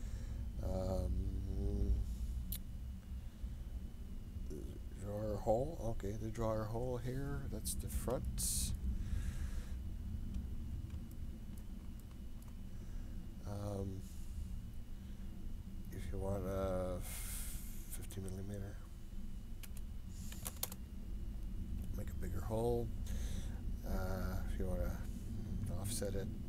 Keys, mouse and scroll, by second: 5.9-21.6 drag, 24.6-26.4 drag.